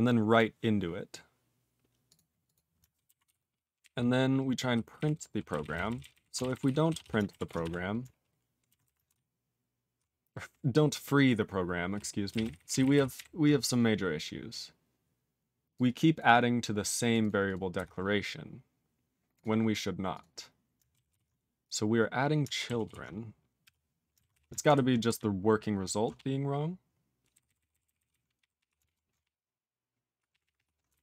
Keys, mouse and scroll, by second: 17.7 q, 18.1-18.8 scroll up 4, 18.8 scroll down 8, 19.3 click, 19.3 click, 19.6-20.1 scroll down 1, 20.1 click, 20.1 click, 20.3 scroll down 3, 21.0 ctrl+s, 21.4 scroll down 1, 21.6 click, 21.7 click, 22.8 ctrl+s.